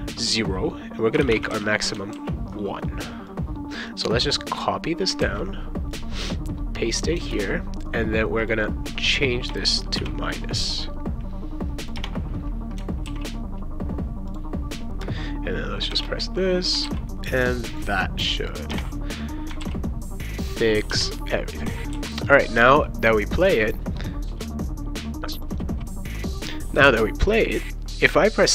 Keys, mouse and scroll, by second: 0.9-2.0 typing, 2.1 ctrl+s, 3.3-5.1 drag, 5.2 ctrl+c, 5.9-7.2 drag, 7.3 ctrl+v, 8.4 click, 9.5 BackSpace, 10.0 -, 11.8 click, 12.0 BackSpace, 13.1 ctrl+s, 14.3 click, 15.9 shift+], 16.8 ctrl+s, 17.7 click, 18.5 click, 18.7 BackSpace, 19.6 ctrl+s, 20.7 click, 20.9 BackSpace, 21.9 ctrl+s, 23.6 click, 25.4 click, 25.8 ctrl+s, 27.2 click.